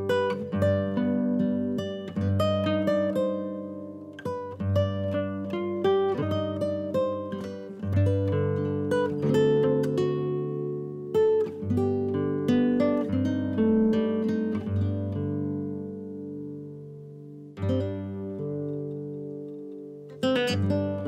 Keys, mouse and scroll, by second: 0.5 shift+middle drag, 0.8 scroll down 1, 1.0-2.5 middle drag, 3.7 a, 4.5 ctrl+j, 5.1 click, 5.3 click, 5.8 click, 6.3 shift+click, 7.2 g, 7.9 click, 8.3 shift+click, 8.8 shift+click, 9.2 shift+click, 9.8 ctrl+j, 10.4 drag, 10.6 click, 11.2 g, 12.9 click, 13.3 click, 14.3 g, 15.0 shift+click, 15.6 ctrl+j, 16.4 scroll down 1, 16.6 click, 17.0 click, 18.2-18.6 right drag, 18.6 shift+click, 19.5 ctrl+j, 19.9 drag, 20.2 click, 20.7 g.